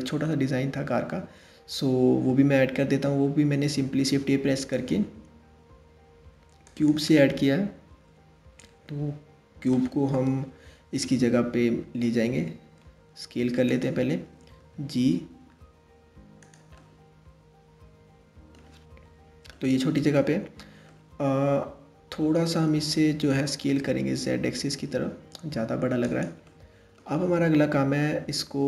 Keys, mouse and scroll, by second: 3.4 shift+a, 9.9 KP_3, 11.8 s, 14.2 g, 16.4-18.7 middle drag, 18.7 KP_1, 19.1-19.9 middle drag, 19.9-20.5 scroll up 1, 20.5-23.1 middle drag, 23.1 s, 26.1-28.6 middle drag.